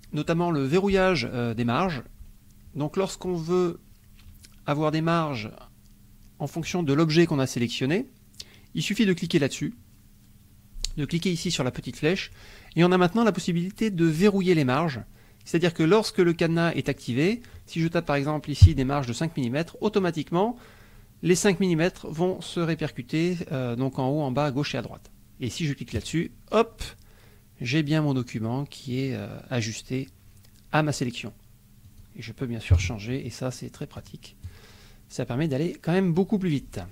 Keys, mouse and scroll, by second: 0.7 click, 9.3 click, 10.8 click, 11.4 click, 13.5 click, 14.1 click, 15.8 click, 16.5 click, 17.3 click, 18.9 KP_5, 20.0 click, 26.0 click, 31.8 click, 32.7 KP_0, 33.9 click, 34.4 click.